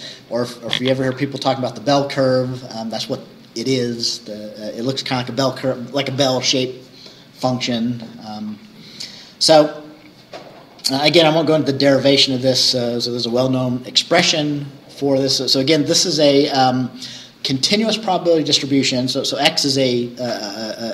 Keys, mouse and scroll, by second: 10.0-10.3 scroll down 2.